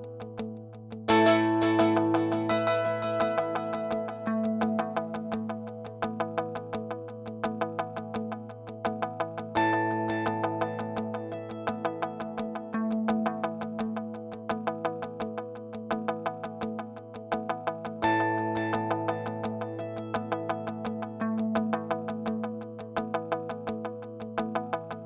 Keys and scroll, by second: 3.4 Return, 12.6 f, 24.3 f.